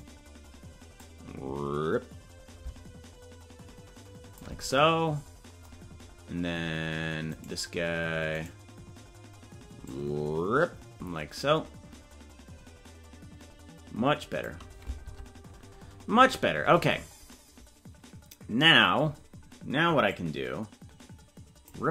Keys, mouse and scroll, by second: 0.0-1.0 right drag, 1.0-4.5 drag, 7.4-9.8 right drag, 9.8-14.4 drag, 15.2 Tab, 16.8-17.4 scroll down 13, 20.1-21.8 drag.